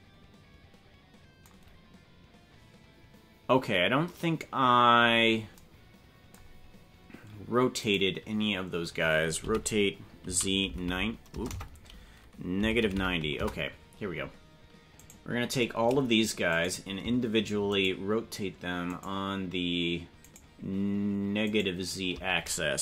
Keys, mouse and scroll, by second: 7.9 right click, 9.4 r, 15.0 right click, 16.6 right click, 17.8 shift+right click, 18.9 shift+right click, 20.3 shift+right click, 21.5 shift+right click.